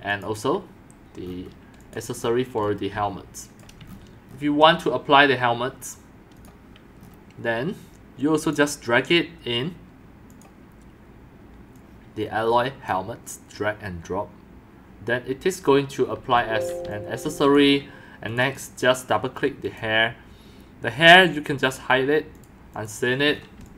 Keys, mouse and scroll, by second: 0.1 click, 1.8 click, 2.2 middle click, 2.6 x, 2.9 c, 3.8 shift+middle click, 4.3 shift+middle click, 7.5 click, 11.7-12.8 drag, 16.3-18.0 typing, 16.9 right click, 18.3 click, 18.4 click, 19.6 click, 21.5 click, 22.3 click, 23.3 scroll up 1, 23.6 x.